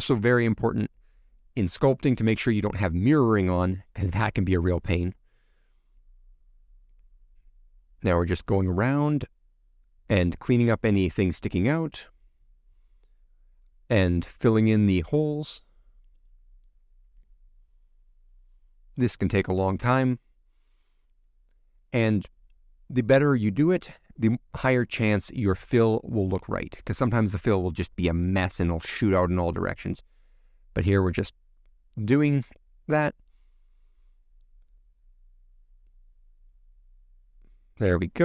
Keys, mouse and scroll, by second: 0.2 scroll up 3, 0.3 middle click, 0.8 scroll down 1, 0.9 middle click, 1.5 c, 1.7 click, 2.2 c, 4.8 shift+middle click, 5.7 c, 8.0 shift+middle click, 8.5 c, 11.1 x, 11.2 scroll down 1, 11.3 middle click, 12.2 scroll up 4, 12.4 click, 13.0 shift+click, 13.3 f, 13.6 shift+middle click, 13.9 click, 14.0 shift+middle click, 14.2 scroll down 2, 14.3 middle click, 14.9 click, 15.4 x, 15.5 middle click, 16.5 scroll up 1, 16.5 shift+middle click, 17.0 scroll up 1, 17.1 shift+middle click, 17.5 click, 17.9 middle click, 18.8 x, 19.0 middle click, 19.7 c, 20.6 shift+click, 23.0 x, 23.1 middle click, 24.1 shift+middle click, 24.6 click, 24.9 shift+click, 25.2 f, 25.3 shift+middle click, 25.9 click, 26.2 x, 26.3 middle click, 26.9 shift+middle click, 28.3 shift+middle click, 29.6 c, 31.5 shift+middle click, 32.5 c, 33.3 x, 33.3 middle click, 34.2-34.7 scroll up 1, 34.7 click, 35.7 shift+click, 35.9 shift+click, 36.1 shift+click, 36.3 shift+click, 36.4 shift+click, 36.6 middle click, 37.0 shift+click, 37.3 shift+click, 37.4 middle click, 37.8 x, 37.9 middle click.